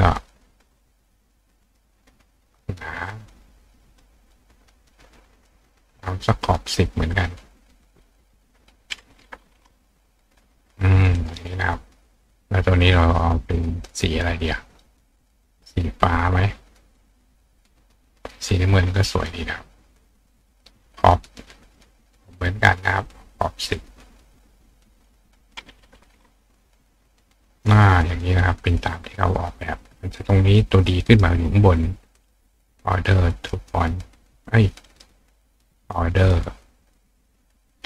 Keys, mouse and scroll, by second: 1.2 click, 3.1-4.4 drag, 5.7-6.8 drag, 7.9 click, 15.2 click, 17.2 click, 20.2-21.5 drag, 22.8-23.8 drag, 25.0 click, 27.6 click, 29.1 click, 31.1 right click, 33.4 click, 34.9 right click, 35.8 click, 36.9 click.